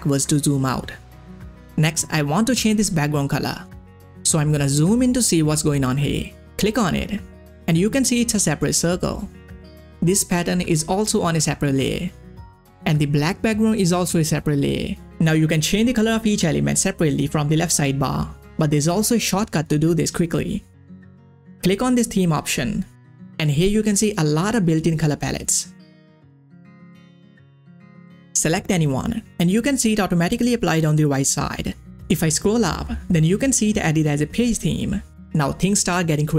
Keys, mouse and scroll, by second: 1.2 ctrl+scroll up 1, 4.3 ctrl+scroll up 1, 5.1 scroll up 1, 5.7 ctrl+scroll down 2, 6.6 click, 9.4 click, 9.4 click, 11.7 click, 18.9 click, 19.0 ctrl+scroll down 1, 19.9-20.7 ctrl+scroll up 2, 20.7-21.2 scroll down 1, 21.2 click, 22.4 click, 23.5 click, 26.6-27.6 scroll down 1, 28.4-31.7 scroll up 1, 31.7-32.4 scroll up 1, 34.2 scroll up 1.